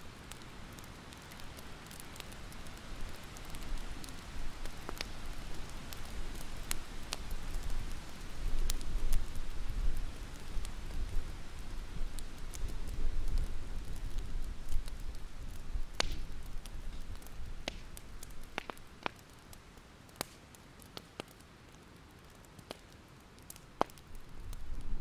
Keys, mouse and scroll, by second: 0.8 click, 1.0 alt+scroll down 1, 1.3 alt+scroll up 1, 1.6-5.1 drag, 5.6-6.1 alt+scroll down 1, 6.1-7.7 alt+scroll up 2, 7.7 click, 8.8 scroll up 2, 9.2 scroll down 1, 9.9 click, 10.0-10.6 scroll up 1, 10.6-15.4 drag, 16.7 shift+click, 16.9 right click, 17.9 click, 18.3-18.7 alt+scroll down 3, 18.7 alt+scroll up 1, 18.9-20.5 scroll down 1, 20.5 click, 20.8 scroll down 1, 21.1-21.9 alt+scroll up 2, 21.9 click, 22.1 alt+scroll down 1, 22.4-23.6 alt+scroll up 1, 23.6 scroll up 1, 24.2-24.7 alt+scroll up 1, 24.7 click.